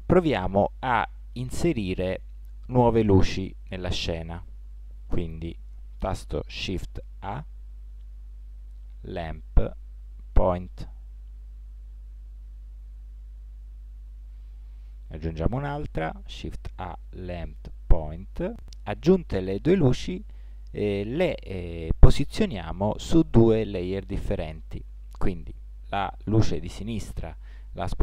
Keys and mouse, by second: 7.3 shift+a, 12.1-13.9 drag, 15.9 shift+a, 19.6-20.8 drag, 26.2-28.0 right drag.